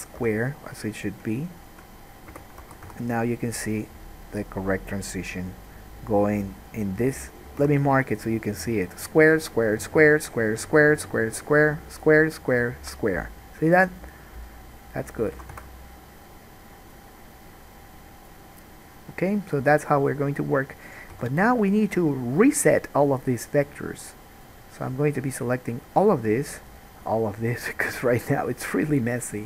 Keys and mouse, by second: 0.4 3, 1.2 middle click, 1.7 shift+middle click, 2.5 f, 2.8 alt+a, 3.1-5.5 drag, 3.1 1, 3.6-5.5 middle drag, 3.6-5.5 right drag, 7.8 3, 8.0 shift+click, 8.5 shift+click, 9.5 shift+click, 10.4-18.4 shift+drag, 10.9-13.1 shift+middle drag, 10.9-13.1 shift+right drag, 15.6 alt+a, 15.7 1, 16.1-18.4 middle drag, 16.1-18.4 right drag, 19.9 alt+a, 21.3 3, 21.9 click, 22.9 shift+click, 23.4-25.5 shift+drag, 27.2-29.4 shift+drag, 27.2-29.4 shift+middle drag, 27.2-29.4 shift+right drag.